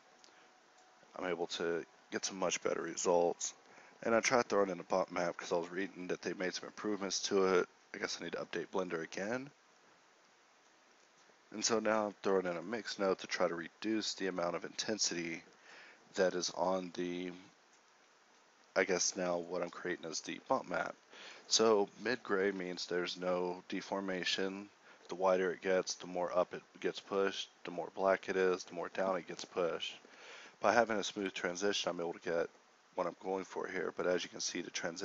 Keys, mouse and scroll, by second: 3.3 click, 3.7-6.2 middle drag, 6.2 ctrl+x, 6.8 shift+a, 9.4 middle click, 19.8 KP_9, 30.4-31.6 middle drag.